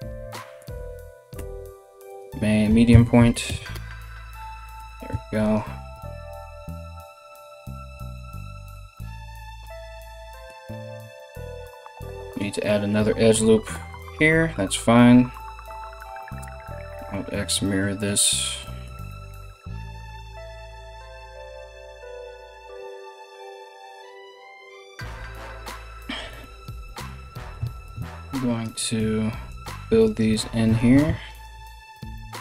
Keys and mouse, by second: 2.3 s, 4.4 g, 5.5 KP_3, 13.3 ctrl+r, 16.3 alt+x, 20.0 right click, 20.3 ctrl+right click, 20.8 ctrl+right click, 21.1 ctrl+z, 21.3 shift+right click, 21.4 s, 22.4-25.4 ctrl+drag, 22.7 right click, 23.1 f, 23.8 f, 24.0 ctrl+z, 24.2 alt+q, 24.3 alt+q, 24.5 f, 24.7 ctrl+z, 24.9 g, 25.4-27.4 middle drag, 27.4-32.4 ctrl+drag, 29.1 middle click, 29.1 right click, 29.6 shift+middle click, 29.6 shift+right click, 30.4 ctrl+z, 30.9 middle click, 30.9 right click, 31.5 f, 32.2 middle click, 32.2 right click.